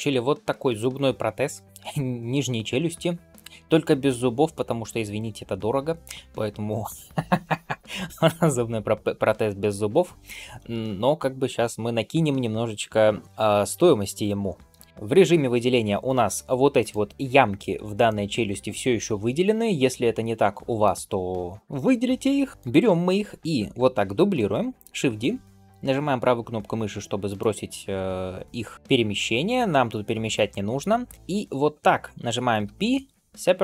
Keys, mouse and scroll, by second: 0.6-3.4 middle drag, 14.9-16.7 shift+middle drag, 17.9-20.7 middle drag, 21.1 shift+middle click, 22.5 middle click, 23.9 shift+d.